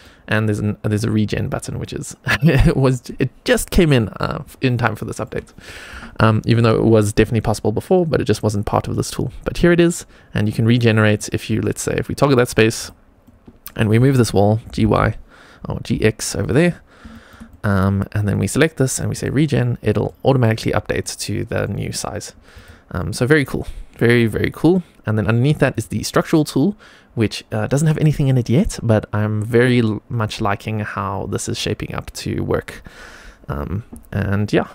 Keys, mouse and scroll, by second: 2.2 scroll down 1, 2.6 middle click, 4.9 shift+middle click, 10.7 middle click, 10.7 scroll down 1, 12.1 click, 12.7 click, 13.1 middle click, 14.5 g, 16.6-17.0 scroll up 2, 17.0 shift+middle click, 17.4 middle click, 18.2 click, 19.0 click, 19.8 middle click, 20.9 middle click, 22.0-22.8 scroll down 2, 22.4 click, 22.8 middle click, 25.6 click.